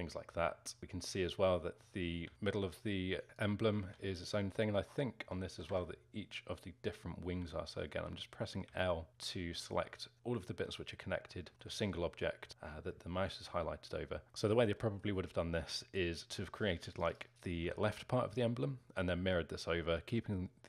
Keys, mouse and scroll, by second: 0.8 l, 2.2 g, 3.8 ctrl+z, 5.5 a, 5.6 a, 7.3-10.5 typing, 11.5 alt+middle click, 12.5 l, 13.2-16.9 alt+middle drag, 16.9 click, 17.1 click, 17.6 l.